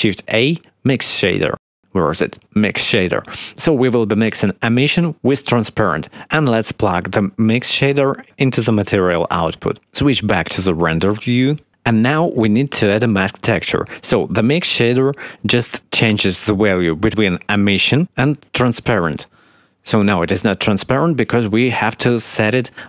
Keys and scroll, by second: 0.2 shift+a, 11.2 z.